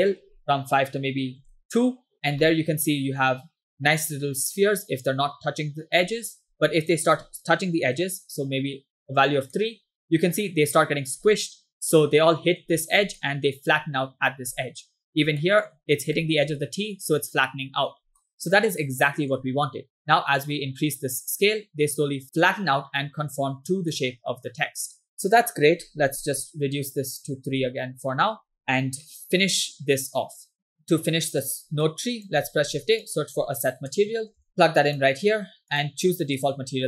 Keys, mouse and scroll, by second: 0.0-1.9 drag, 2.5 middle click, 3.3-3.6 scroll up 2, 3.8-4.6 scroll down 2, 4.6-6.1 middle drag, 6.5 scroll up 2, 6.8-8.3 drag, 9.6 middle click, 11.3-12.7 middle drag, 13.3 middle click, 14.6 middle click, 15.5 shift+middle click, 15.8 scroll up 2, 16.3 shift+middle click, 18.3-19.4 middle drag, 20.1-24.0 drag, 24.4 scroll down 2, 24.6 middle click, 25.4-27.9 drag, 28.6 scroll down 2, 29.1 middle click, 29.5-30.1 scroll up 2, 30.4 scroll down 3, 30.6 middle click, 30.7-31.5 scroll up 2, 31.9 click, 32.6 shift+a, 35.8-36.8 drag.